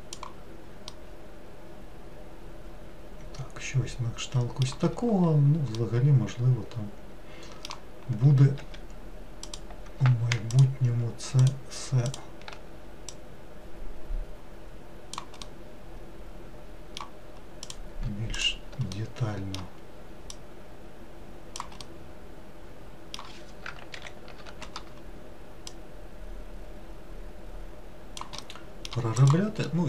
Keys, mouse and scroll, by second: 1.0-4.0 middle drag, 5.9-8.6 middle drag, 8.6 3, 9.5 click, 10.6 shift+click, 11.5 shift+click, 12.2 shift+click, 13.2 click, 15.5-17.7 middle drag, 17.7 click, 18.4 shift+click, 19.0-20.4 middle drag, 20.4 click, 21.9-24.0 middle drag, 24.0 ctrl+l, 25.8 click, 28.5 middle click, 29.3 click, 29.7 middle click.